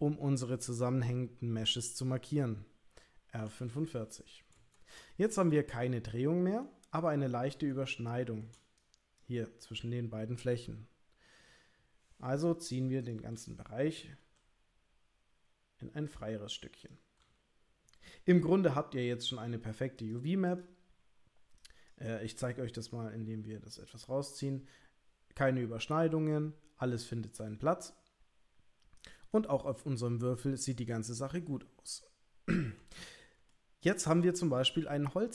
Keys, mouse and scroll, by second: 3.4 r, 5.3 middle click, 5.8 click, 14.2 g, 18.3 g, 23.2 g, 29.3-30.9 middle drag, 33.0 ctrl+middle click, 33.5 middle click, 34.2-35.3 shift+middle drag.